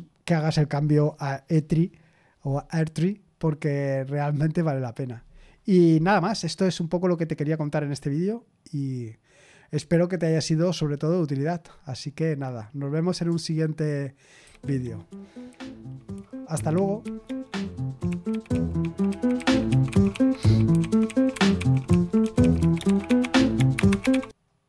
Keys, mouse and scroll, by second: 14.4 super+x.